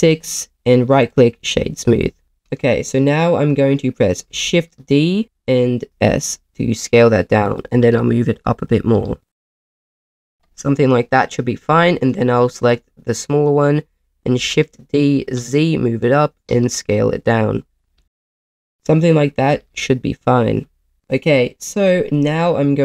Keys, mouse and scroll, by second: 1.1 click, 1.1 right click, 2.2 g, 2.2 z, 2.5 click, 4.3 shift+d, 5.9 s, 7.4 click, 7.7 g, 7.8 z, 8.5 click, 8.9 s, 9.7 click, 9.7 g, 9.7 z, 10.1 click, 10.5 click, 12.6-14.1 drag, 14.4 shift+d, 15.2 z, 16.0 click, 16.5 s, 17.8 click, 17.9-19.5 typing, 18.3 click, 18.5 click, 18.6 click, 18.7 middle click, 19.1 middle click, 20.6 z, 20.9 KP_0.